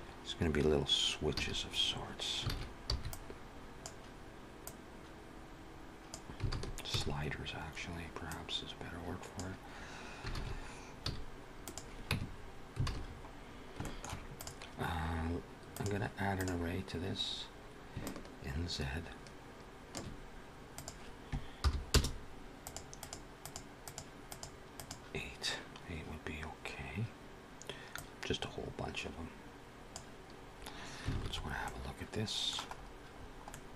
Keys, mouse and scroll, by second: 1.2 a, 2.3 alt+a, 2.7 b, 4.5 click, 6.3 alt+a, 8.1 click, 10.2 alt+a, 10.9 z, 11.9 Tab, 12.7 alt+a, 12.8-13.5 scroll down 5, 13.6 shift+middle click, 14.1 click, 15.5 click, 17.8 shift+click, 20.6 click, 22.5 click, 23.1 click, 23.4 click, 23.8 click, 24.2 click, 24.6 click, 28.0 click, 30.9 alt+a, 31.1 scroll down 4, 31.5 middle click, 32.6-33.0 scroll up 1, 33.0-33.3 scroll down 2, 33.3 middle click.